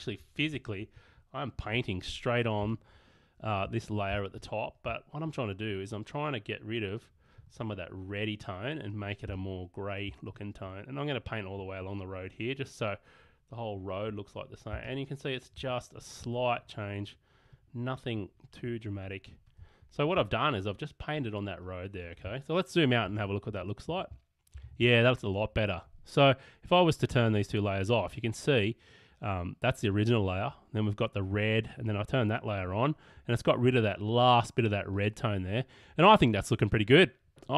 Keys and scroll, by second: 2.7 space, 4.1 space, 9.3 space, 14.8 space, 23.3 super+-.